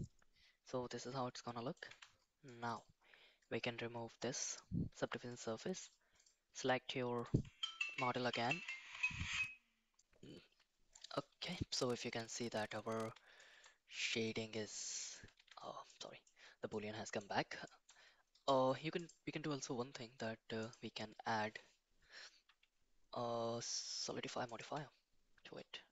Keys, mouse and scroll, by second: 1.9 Tab, 2.4 middle click, 4.4 click, 5.3 middle click, 7.3-9.4 drag, 12.4 middle click, 13.3 shift+middle click, 14.5 middle click, 15.3 Tab, 15.8-16.2 middle drag, 16.6-17.1 middle drag, 17.6 shift+middle drag, 19.0-24.5 drag.